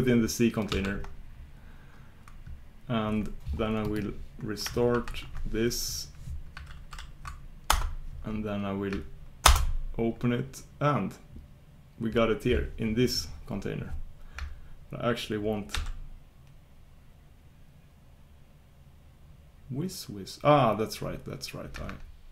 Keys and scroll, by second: 9.6 super+Return.